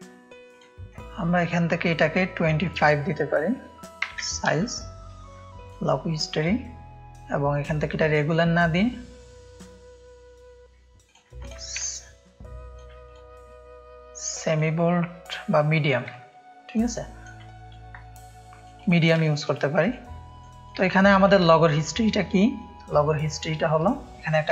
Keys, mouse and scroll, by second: 2.7 click, 4.1 KP_2, 4.2 KP_5, 4.9 Return, 4.9 KP_5, 4.9 KP_2, 5.7 click, 6.4 click, 7.6-9.5 drag, 11.1-12.8 drag, 11.9 ctrl+space, 13.1 click, 14.5-15.2 drag, 15.5 click, 16.2 ctrl+click, 16.3 ctrl+space, 17.0 ctrl+click, 17.8 shift+click, 19.2 space, 19.4 click, 20.0 click, 20.9 ctrl+space, 20.9 ctrl+click, 21.5 click, 21.5 space, 22.5 click, 23.1-23.5 drag, 23.9 alt+click.